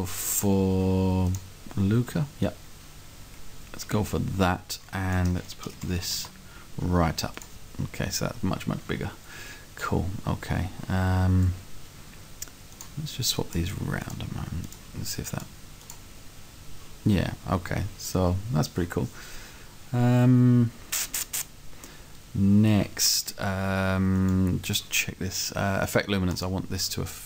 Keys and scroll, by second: 5.7 2.